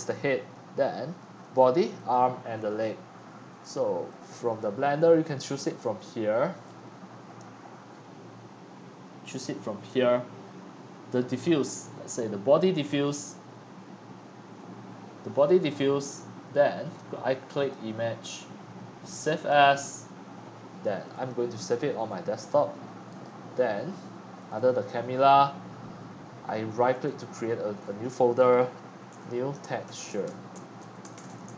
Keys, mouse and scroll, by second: 1.9-2.3 drag, 2.7 click, 3.6 click, 4.2-6.1 drag, 9.2 click, 9.4-13.0 drag, 16.5 click, 17.5 click, 19.3 click, 23.0-24.4 drag, 24.6 click, 25.4 click, 27.0 scroll, 27.4-29.1 drag, 28.9-31.5 typing.